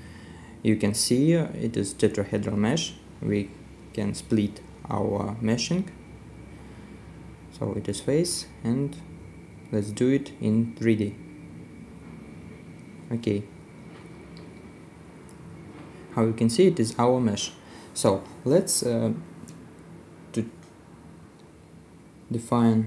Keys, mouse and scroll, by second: 2.8 middle click, 7.0 middle click, 11.2 right click, 12.0 scroll down 1, 12.4 middle click, 15.6 middle click, 19.7 middle click, 19.8 right click.